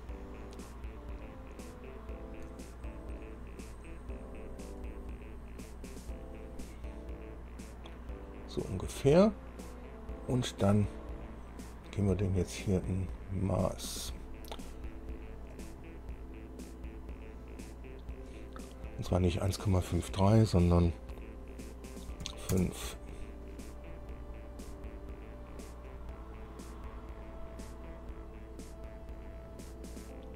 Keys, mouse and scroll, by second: 3.4 click, 5.0 click, 5.9-9.4 drag, 13.7 click, 15.7 click, 22.4 KP_5, 22.7 KP_Enter, 26.1-30.3 drag.